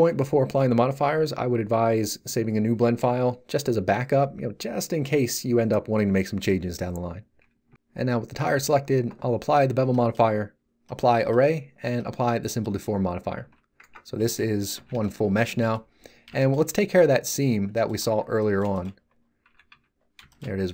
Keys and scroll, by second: 13.4 z, 13.8 Tab, 14.1 a, 14.7 z, 18.0 Tab, 19.4 z.